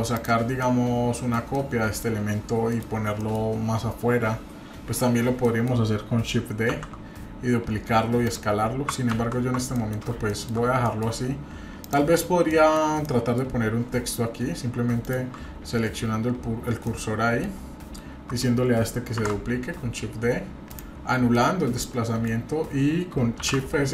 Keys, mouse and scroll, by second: 0.1 click, 0.6-1.3 middle drag, 1.5-2.0 middle drag, 2.7 middle click, 3.2 middle click, 5.4 middle click, 6.7 shift+d, 9.1 ctrl+z, 9.7 middle click, 9.9-10.2 scroll down 2, 10.3 shift+middle click, 10.8 middle click, 11.3-11.7 scroll up 1, 11.8 click, 12.5-12.8 middle drag, 13.0 middle click, 15.0 shift+right drag, 16.8 middle click, 19.2 shift+d, 21.3 middle click, 23.4 shift+s.